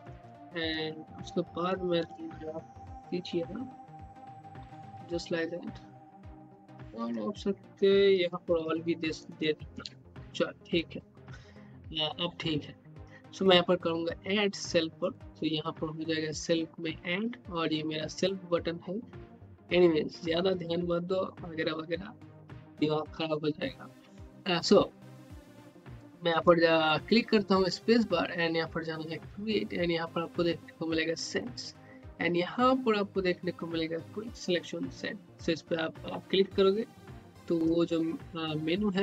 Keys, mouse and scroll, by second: 0.1 Caps_Lock, 1.9 shift+-, 3.5-4.6 typing, 6.9 click, 7.8-9.7 typing, 15.0 click, 26.4 space, 28.5 space, 30.8 space, 35.3 space, 36.0 space.